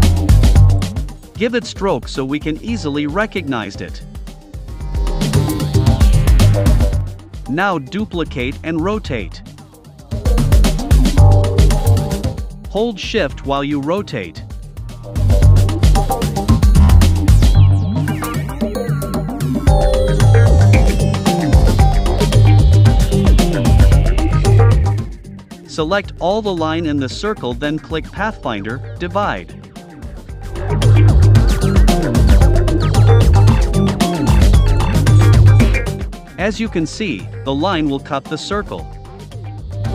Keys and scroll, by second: 4.5 super+c, 4.7 super+f, 8.6 super+c, 8.9 super+f, 11.9 super+c, 12.2 super+f.